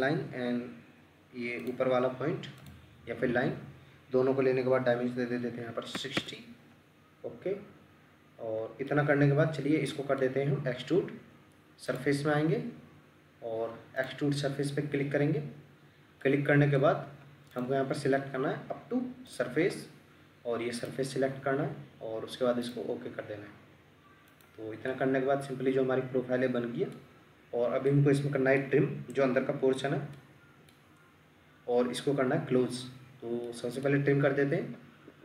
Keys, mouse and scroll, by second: 5.6-5.9 typing, 6.2 Return, 8.4 scroll up 1, 8.9 middle click, 14.9-15.4 scroll down 1, 16.2 middle click, 24.9 middle click, 27.1 scroll up 1, 27.9 middle click, 31.1 scroll down 1, 33.5 middle click, 34.1-35.0 scroll down 1, 35.1 Escape.